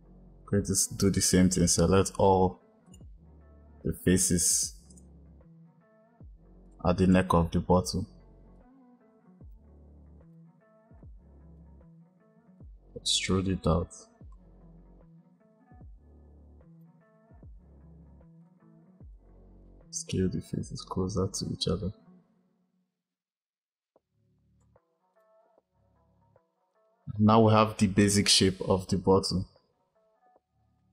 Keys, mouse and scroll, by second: 2.7 click, 4.7 click, 6.5-8.4 drag, 10.2 click, 10.9 shift+click, 13.1 e, 18.3 click, 25.0 click, 26.6 click.